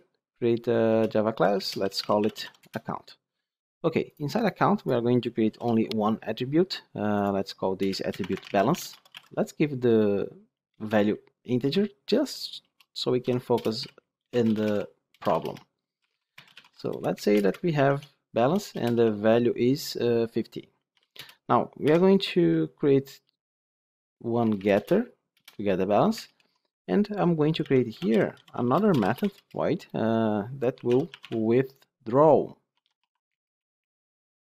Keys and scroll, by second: 15.2 ctrl+BackSpace, 21.8 alt+Insert.